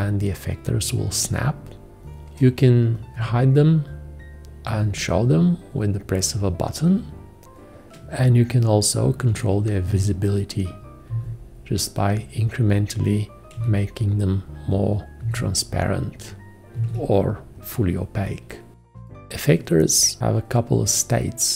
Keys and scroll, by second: 3.2 F1, 4.6 F1, 9.8 ctrl+F1, 11.1 ctrl+F1, 13.6 ctrl+F1, 15.2 ctrl+F1, 16.8 ctrl+F1.